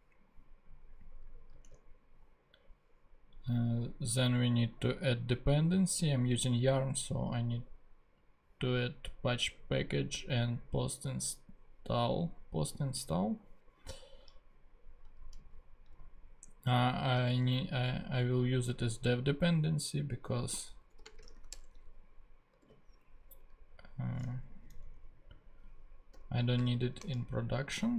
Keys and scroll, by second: 1.6 super+Tab, 15.4 super+c, 17.3 super+Tab, 20.5-21.7 typing, 22.5 super+Return, 22.6 super+v, 24.5 alt+Left, 26.1 alt+-, 26.5 shift+d, 27.0 shift+space.